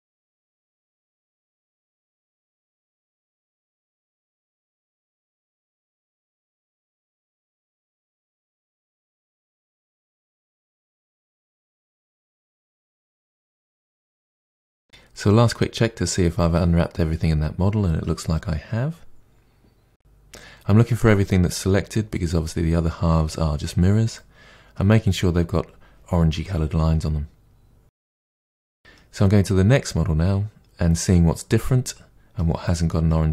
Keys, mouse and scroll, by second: 0.0 middle click, 0.1 Tab, 0.2 KP_Divide, 0.4 middle click, 0.7 Tab, 0.8 click, 0.9 Tab, 1.0 middle click, 1.3 a, 1.6 u, 1.8 Tab, 1.8 middle click, 2.1 scroll down 1, 2.3 middle click, 2.5 click, 2.7 a, 2.9 u, 3.1 middle click, 3.6 Tab, 3.7 click, 3.8 Tab, 3.9 middle click, 4.3 3, 4.4 click, 4.7 ctrl+e, 4.8-5.2 middle drag, 5.2 KP_Divide, 5.4 middle click, 5.7 alt+click, 5.9 2, 5.9 alt+click, 7.1 a, 7.3 middle click, 8.1 u, 8.3 middle click, 8.7 scroll down 1, 8.9 KP_Divide, 9.2 middle click, 9.4 scroll down 1, 9.5 middle drag, 9.7 Tab, 9.8 click, 10.3 Tab, 10.5 Tab, 12.5-13.7 middle drag, 13.7 a, 13.8 Tab, 14.0-15.9 middle drag, 16.6 middle click, 17.9-20.8 middle drag, 20.8 a, 21.0 middle click, 22.5-23.5 middle drag, 23.5 Tab, 23.7-24.0 scroll down 4, 23.7 shift+middle click, 24.0-24.5 shift+middle drag, 24.5 Tab, 24.7 middle click, 25.0 scroll up 1, 25.2-25.5 scroll down 1, 25.5-32.0 shift+middle drag, 32.0 click, 32.2 Tab, 32.3 click, 32.6 Tab, 32.9 KP_Decimal, 33.1 scroll down 4, 33.2 middle click.